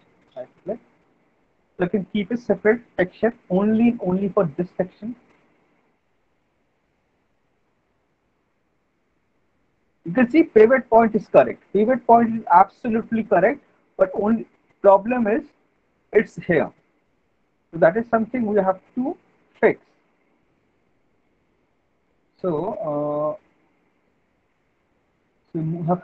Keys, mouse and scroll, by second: 0.3 right click, 1.7 alt+middle click, 2.8 w, 3.8 alt+middle click, 4.6 alt+middle click, 5.9 click, 7.4 w, 8.5 alt+middle click, 8.7 middle click, 8.9 alt+middle click, 9.4 alt+middle click, 9.5 alt+middle click, 9.9 middle click, 15.7 alt+middle click, 23.3 click, 23.9 click, 25.2 alt+middle click.